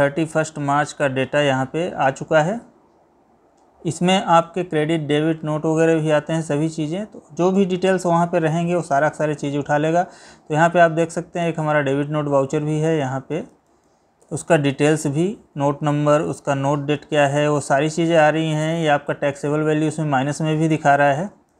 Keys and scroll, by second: 4.6 Down, 7.7 Up, 9.1 Down, 12.6 Right, 14.4 Left, 17.5 Right, 18.8 Left, 19.6 Up, 20.1 Down, 20.5 Right.